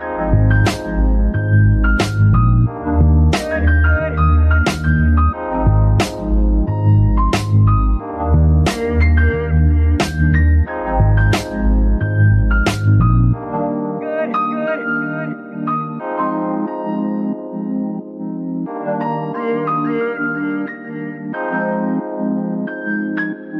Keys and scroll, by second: 1.4 z, 4.5 ctrl+s, 11.3 F2, 12.4-15.8 typing, 16.5 Return, 19.6 F2, 20.4 BackSpace, 20.6 BackSpace, 20.7 BackSpace, 20.9 BackSpace, 22.0 BackSpace, 22.2 BackSpace, 22.3 BackSpace.